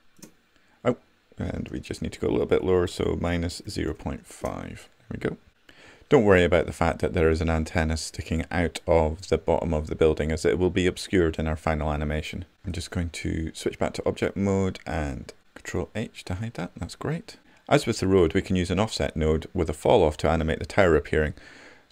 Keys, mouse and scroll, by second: 12.8-15.8 right drag, 15.8 ctrl+h.